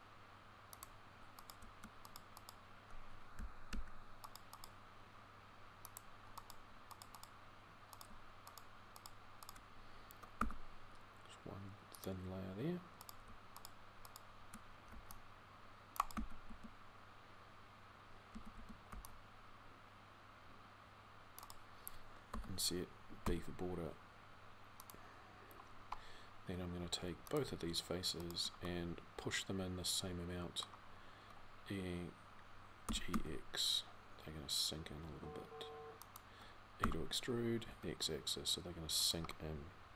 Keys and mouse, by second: 14.7 c, 16.3 a, 18.1 a, 18.7 c.